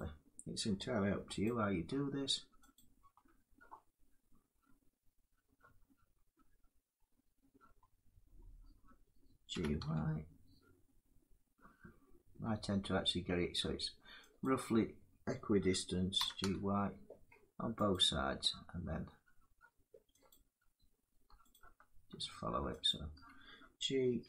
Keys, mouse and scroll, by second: 1.1 alt+click, 2.4 click, 9.2 g, 14.0 click, 15.8 g, 20.9 click, 21.2 alt+click, 22.5 click, 23.9 g, 24.1 y.